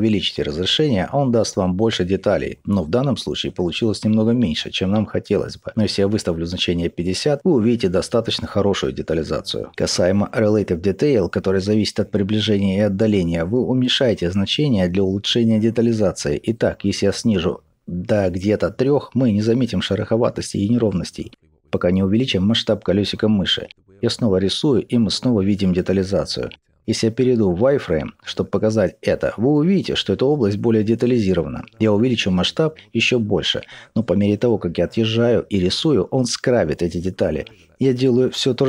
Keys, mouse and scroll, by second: 12.6-13.8 scroll up 2, 13.8-15.1 scroll down 2, 15.1-22.6 drag, 24.7-38.6 drag, 26.9 z, 30.7-31.6 scroll up 2, 33.5-34.0 scroll down 1, 34.2 scroll up 1, 34.5-35.6 scroll down 2, 37.2 scroll down 1.